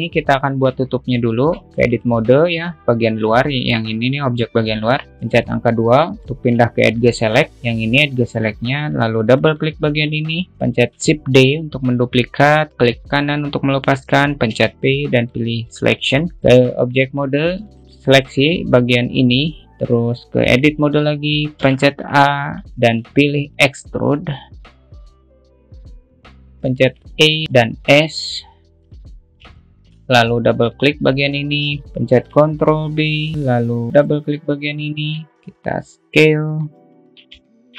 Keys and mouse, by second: 0.7-1.1 alt+middle drag, 2.2 Tab, 6.5 2, 6.7 middle click, 9.7 click, 9.9 click, 11.2 shift+d, 16.9 Tab, 18.3 click, 20.9 Tab, 21.9 a, 22.9 `, 23.1 shift+middle click, 24.0 e, 26.2-27.2 alt+middle drag, 27.2 e, 30.0 middle click, 31.3 click, 31.8 ctrl+b, 33.4 alt+middle click, 34.2 click, 34.5 click, 34.8 alt+middle click, 35.7 s.